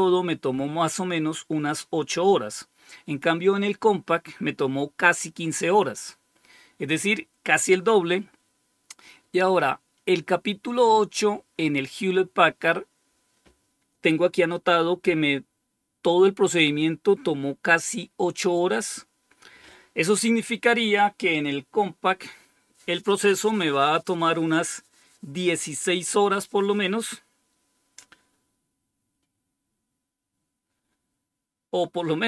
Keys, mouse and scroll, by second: 9.9-10.7 scroll down 2, 10.7-32.2 scroll down 1.